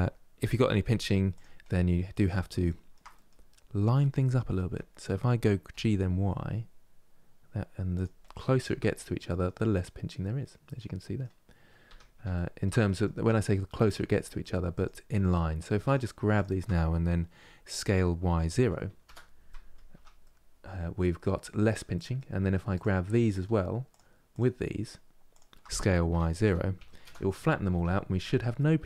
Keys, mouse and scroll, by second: 1.4-4.3 middle drag, 4.3 g, 7.9 middle click, 8.4 Tab, 9.0 middle click, 9.9-10.4 scroll down 2, 10.4 middle click, 11.1 scroll up 3, 12.1-14.4 shift+middle drag, 14.4 click, 14.9 middle click, 15.5-17.5 shift+drag, 17.5 s, 19.2 middle click, 19.6 Tab, 19.9-21.4 middle drag, 21.4 Tab, 21.6 middle click, 22.4 click, 23.6-25.8 shift+drag, 25.8 s, 27.4 Tab, 27.8 scroll down 2, 28.3-28.8 middle drag.